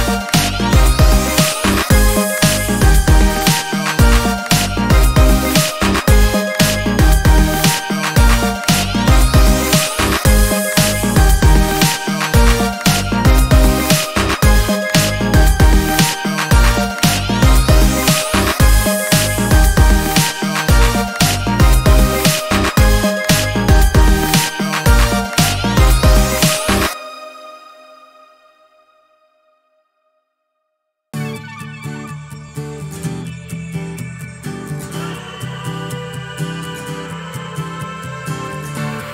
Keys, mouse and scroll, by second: 0.5 ctrl+shift+click, 1.8 ctrl+shift+click, 4.9 click, 7.4 ctrl+shift+click, 8.9 d, 9.2 click, 11.1 click, 12.3 click, 13.2 ctrl+shift+space, 14.5-17.0 drag, 18.6 click, 19.7 KP_0, 19.9 KP_Enter, 21.4-23.6 drag, 24.2 click, 25.0 middle click, 25.2 click, 26.1-27.5 ctrl+shift+drag, 27.8-29.7 ctrl+shift+drag, 30.2 ctrl+scroll down 2, 30.9 ctrl+space, 34.2 click, 36.0-37.8 shift+drag, 39.0 shift+click.